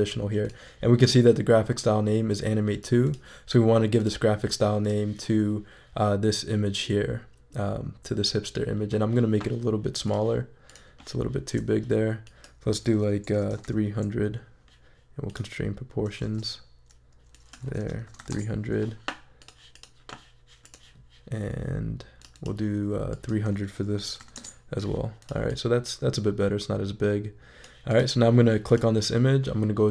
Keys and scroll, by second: 13.1-14.0 typing, 16.5 super+z, 17.6-18.5 typing, 23.7-24.6 typing.